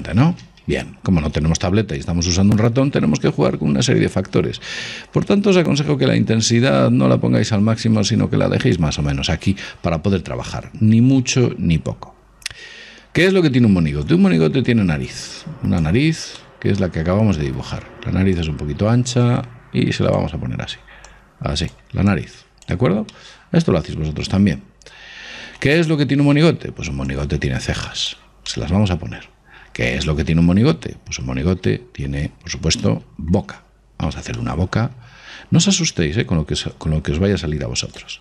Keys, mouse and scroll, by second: 0.2 ctrl+z, 0.5 ctrl+z, 6.8 click, 14.3 click, 16.6-18.3 middle drag, 18.6 click, 20.7-25.1 middle drag, 21.3-24.2 drag, 26.2-28.1 middle drag, 27.3 click, 28.7-30.5 middle drag, 30.7 scroll up 1, 31.7 scroll up 1, 31.8-36.5 middle drag, 36.0 click.